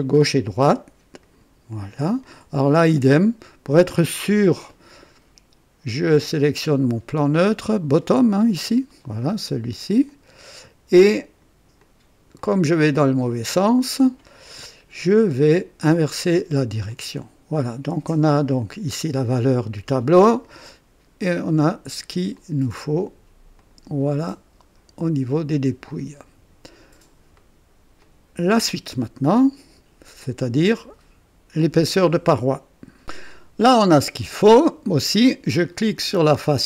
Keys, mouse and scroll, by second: 0.4 click, 1.2 click, 2.2-3.1 drag, 6.0 click, 7.3-8.2 drag, 9.2 click, 10.0-10.7 drag, 10.9 click, 11.8 click, 13.0-13.7 drag, 15.8 click, 16.9-17.7 drag, 20.4-22.2 drag, 22.3 click, 23.5 click, 24.2-25.7 drag, 25.8-27.1 drag, 27.3 right click, 28.0-28.6 drag, 35.0-35.7 drag, 36.0 click.